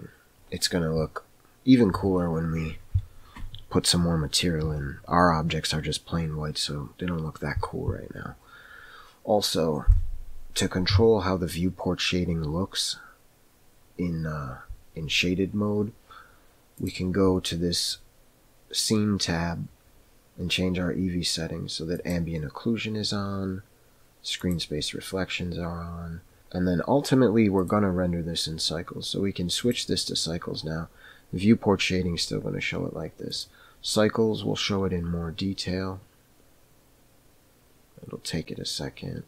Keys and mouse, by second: 16.8 click, 22.3 click, 25.1 click, 27.6 click, 33.4 click.